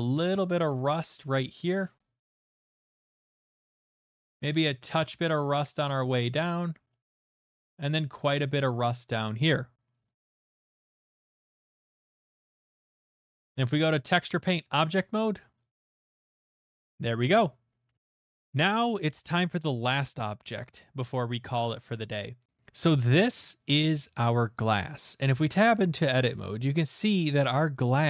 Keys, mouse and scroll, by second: 0.0 middle click, 0.2 shift+middle click, 0.6 shift+middle click, 1.0 middle click, 1.0 middle click, 3.1 click, 3.3 middle click, 3.8 click, 4.0 middle click, 4.3 shift+middle click, 4.6 click, 5.2 shift+middle click, 5.7 click, 6.4 shift+middle click, 6.9 click, 7.3 middle click, 7.6 shift+middle click, 7.9 middle click, 8.9 shift+middle click, 9.4 click, 9.9 middle click, 10.1 click, 10.4 middle click, 10.9 click, 11.4 click, 12.1 click, 14.9 click, 14.9 shift+middle click, 15.3 middle click, 15.6 click, 15.6 click, 16.6 middle click, 16.6 click, 16.9 shift+middle click, 17.9 shift+middle click, 17.9 shift+middle click, 18.0 click, 23.3 middle click, 23.7 middle click, 23.7 middle click, 23.9 scroll, 24.1 shift+middle click, 25.0-25.5 scroll, 25.2 Tab, 27.7 click, 27.9-28.0 scroll.